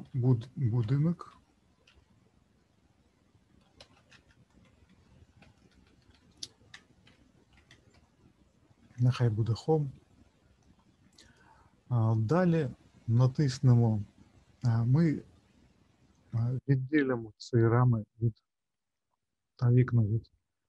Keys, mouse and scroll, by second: 0.0 BackSpace, 5.5 BackSpace, 5.7 BackSpace, 5.9 BackSpace, 6.1 BackSpace.